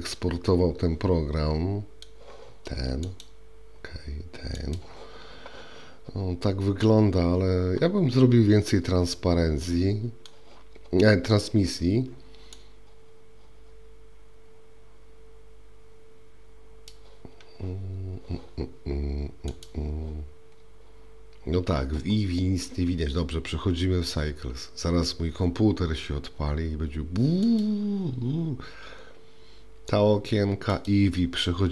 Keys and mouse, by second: 0.1-2.1 middle drag, 9.1-10.3 middle drag, 12.6-16.9 drag, 27.4 click, 30.9-31.7 drag.